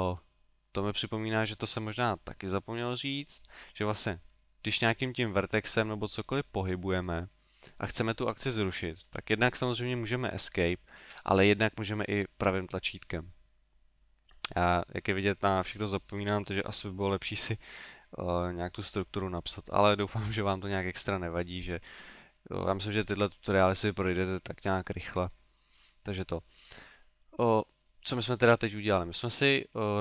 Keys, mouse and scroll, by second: 2.6 right click, 5.2 g, 12.4 right click, 26.7 middle click.